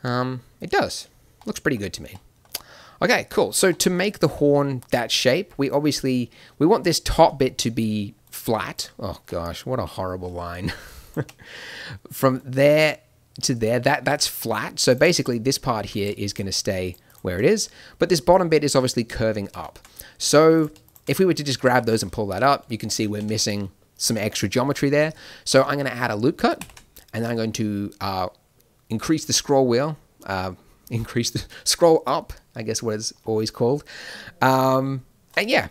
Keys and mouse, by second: 1.4 middle click, 7.9 d, 8.8 d, 8.9 d, 9.7 n, 11.2 n, 11.9 d, 14.4 d, 20.5-24.8 drag, 21.6 g, 26.6 ctrl+r.